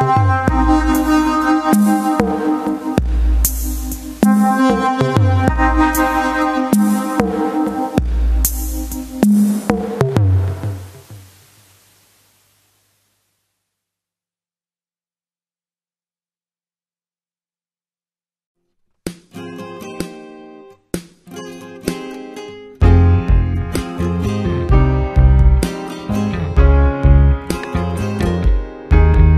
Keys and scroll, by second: 0.3 Return, 1.1 ctrl+d, 1.5 alt+i, 1.7 a, 2.1 c, 3.5 Return, 4.7 space, 5.5 ctrl+w, 5.7 Return, 7.1 alt+space, 7.5 c, 7.8 Return, 8.4 ctrl+space, 9.1 ctrl+g, 9.9 space, 11.0 Return, 16.3 ctrl+space, 21.0 Return, 21.8 shift+F2, 24.8 Return, 25.8-26.8 typing, 26.9 shift+F2, 27.5 ctrl+KP_Add, 27.9 space.